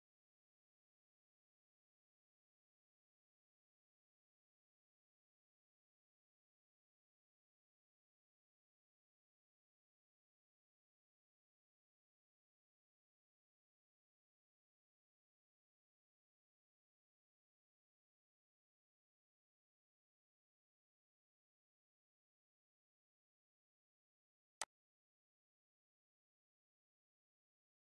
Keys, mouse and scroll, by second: 0.2-2.3 shift+middle drag, 2.3 scroll down 1, 3.6 middle click, 4.6 scroll down 1, 5.1-14.4 shift+middle drag, 14.4 shift+scroll up 1, 15.6-19.8 middle drag, 19.8 scroll up 1, 23.6 click, 26.4 scroll up 1, 27.0 middle click.